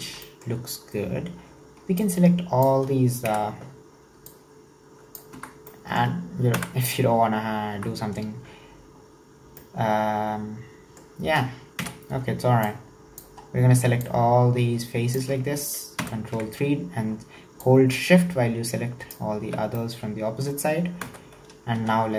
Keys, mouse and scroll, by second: 0.1 Tab, 0.3-1.4 middle drag, 1.4 3, 2.0 click, 3.3 KP_3, 4.3 click, 5.4 Tab, 5.6-6.5 scroll down 4, 5.7 middle click, 6.5 KP_1, 7.2-7.8 scroll up 3, 7.8 Tab, 9.1-9.6 scroll down 1, 9.6-11.8 middle drag, 11.8 KP_3, 12.7 click, 13.4-14.0 scroll up 2, 14.0 click, 16.0 ctrl+KP_3, 17.6 shift+drag, 19.5 scroll down 4, 19.8-21.1 middle drag, 21.1 KP_1, 21.8 KP_Enter.